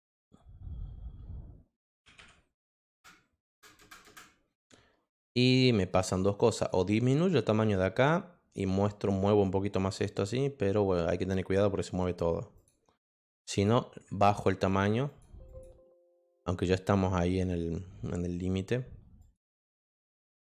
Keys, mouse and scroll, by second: 1.9-3.7 typing, 4.5 click, 5.2 click, 6.5 click, 9.3 click, 10.9 click, 12.5 click, 13.0 click, 13.5 click, 15.0 click, 15.4 click, 19.2 click.